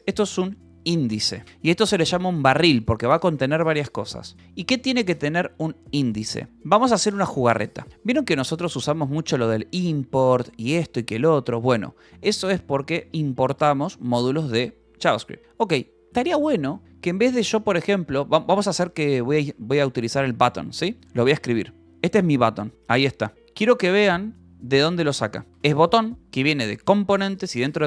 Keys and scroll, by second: 3.4 Escape, 5.0 Return, 6.2-7.2 typing, 7.9 Return, 8.5 g, 9.8 shift+v, 11.4 Escape, 13.0 shift+v, 14.3 Escape, 14.7 shift+;, 15.7 j, 18.6 ctrl+j, 18.9-22.2 typing, 22.7 Return, 23.4 /, 24.7 Escape, 25.0-27.2 typing.